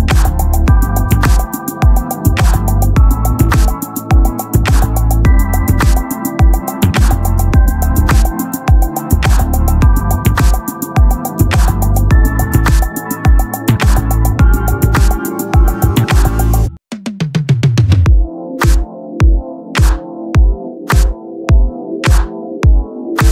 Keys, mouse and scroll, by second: 1.0 s, 2.2 click, 3.6 Tab, 3.9 z, 5.0-8.1 typing, 8.4 Tab, 9.1 Tab, 10.2 ctrl+z, 10.5 ctrl+z, 10.6 ctrl+z, 11.2 Tab, 11.8-13.0 drag, 13.0 right click, 13.4 click, 13.7 click, 14.0 click, 14.2 click, 17.5-19.2 middle drag, 20.1-21.2 drag, 20.1 shift+a, 21.2 s, 22.4-23.3 drag.